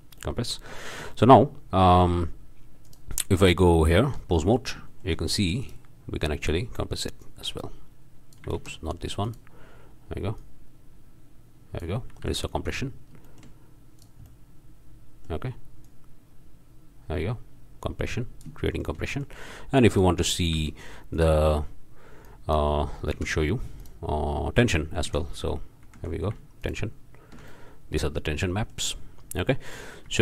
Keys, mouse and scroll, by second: 0.2-0.7 drag, 0.8-1.6 shift+drag, 2.8 click, 3.4 Tab, 4.6-4.9 shift+drag, 5.0 shift+drag, 5.6-6.0 shift+drag, 6.0 middle click, 6.3-6.6 drag, 7.2-8.5 drag, 8.5 ctrl+z, 9.2 drag, 10.4-12.0 drag, 12.2 alt+a, 12.5-13.1 alt+drag, 13.2-13.6 shift+drag, 14.0 drag, 14.3 click, 18.7 shift+scroll up 1, 19.0 shift+click, 19.1-19.4 shift+drag, 19.9 click, 20.5 Tab, 21.1 drag, 22.2 click, 23.1 shift+d, 23.8 click, 25.1 ctrl+c, 25.8 ctrl+v, 26.6 ctrl+shift+click, 27.5-28.1 ctrl+shift+drag, 28.6 click, 29.7 click, 30.1 Tab.